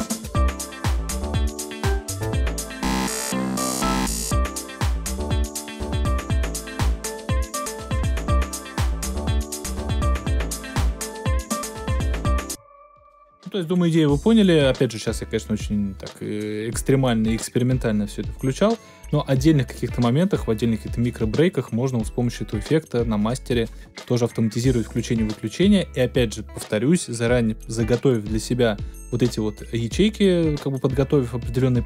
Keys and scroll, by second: 12.4 alt+super+space, 13.4 space.